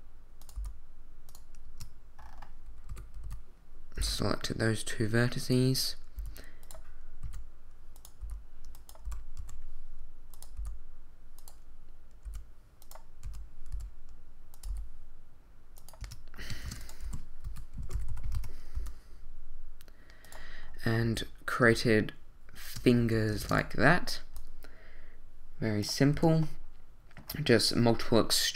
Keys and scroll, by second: 0.5 g, 1.6 Tab, 2.9 z, 3.2 a, 4.0 b, 6.2 e, 7.2 s, 8.2 g, 9.0 r, 9.4 y, 10.6 g, 12.2 e, 13.2 r, 13.7 y, 14.7 g, 16.0 Tab, 16.5 shift+Tab, 16.6-18.7 typing, 18.3 Return, 21.0 z, 21.7 shift+z, 23.4 shift+d, 26.1 a.